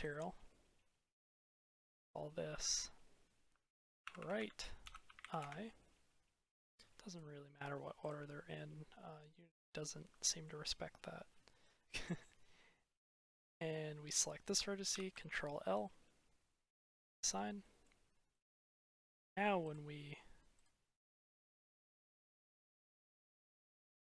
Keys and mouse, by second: 2.5-5.4 drag, 8.3 middle click, 8.7 click, 8.9 middle click, 10.0 shift+click, 11.5 click, 13.4 click, 14.8 ctrl+l, 16.9 click, 17.5 click, 17.7 middle click, 18.2 middle click, 18.4 click, 19.5 click, 21.3-21.8 drag, 22.3 click.